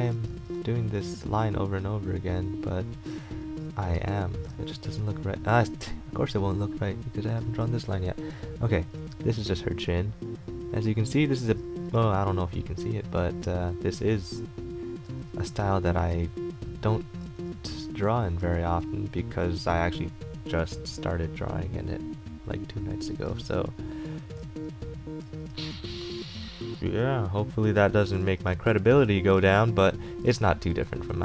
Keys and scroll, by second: 0.3 ctrl+z, 4.7 ctrl+z, 7.6 ctrl+z, 11.6 ctrl+z, 17.4 ctrl+z, 18.6 ctrl+z, 23.5 ctrl+z, 24.6 ctrl+z, 26.4 ctrl+z, 29.6 ctrl+z.